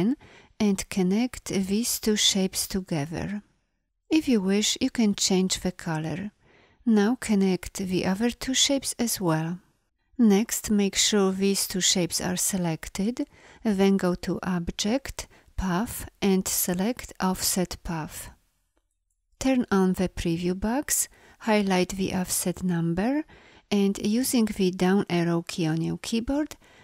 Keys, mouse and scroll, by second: 12.7 v.